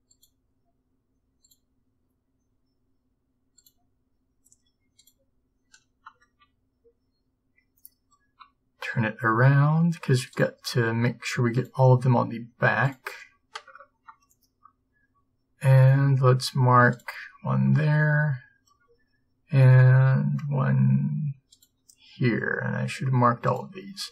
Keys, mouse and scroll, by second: 3.7-5.9 middle drag, 17.0-18.8 drag, 23.5-24.1 middle drag.